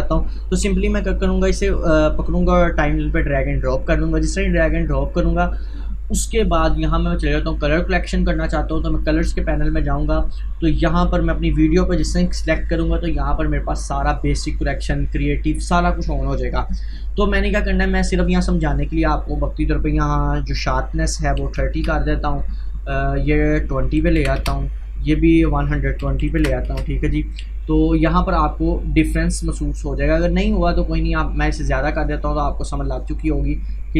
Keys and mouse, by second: 1.9-7.2 drag, 9.0 click, 12.1 click, 19.2 click, 19.4 click, 23.2 click, 28.3-33.9 drag.